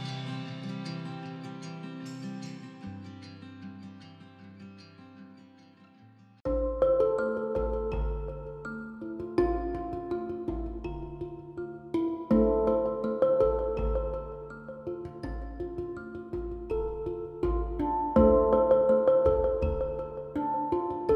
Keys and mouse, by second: 0.9-4.3 typing, 5.4-9.2 typing, 6.0 middle click, 9.4 click, 10.2-12.2 typing, 13.7-18.5 typing, 17.1 alt+h, 20.3 drag, 20.5 click, 20.6-21.1 typing, 20.9 click.